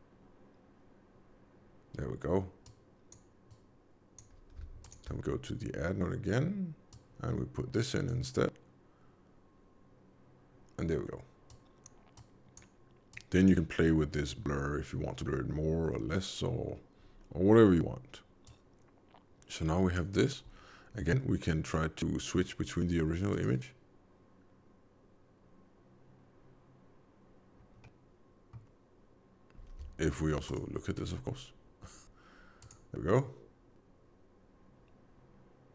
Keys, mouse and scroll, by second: 2.6 click, 3.5 click, 4.8 ctrl+shift+click, 4.9 ctrl+shift+click, 6.9 click, 11.4 click, 12.1 click, 18.4 click, 21.6 middle click, 23.3 click, 27.7 middle click, 30.4 ctrl+shift+click, 32.6 click.